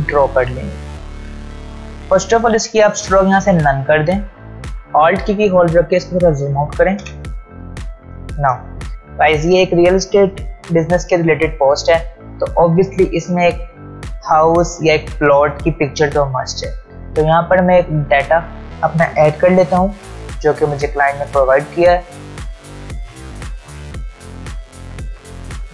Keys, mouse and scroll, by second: 5.1 alt+scroll down 1, 7.0 v, 22.4-25.3 drag, 24.4-25.7 drag.